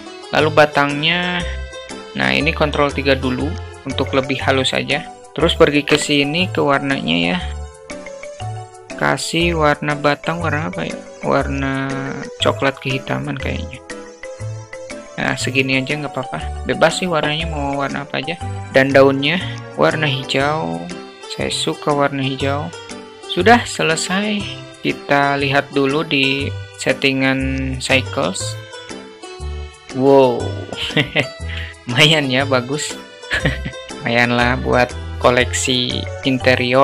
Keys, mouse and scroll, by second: 3.7 ctrl+3, 5.9 click, 7.7-8.3 drag, 8.7 click, 16.4 click, 18.6-19.0 drag, 24.1-24.5 shift+middle drag, 24.8-25.3 shift+middle drag, 26.6-28.6 drag.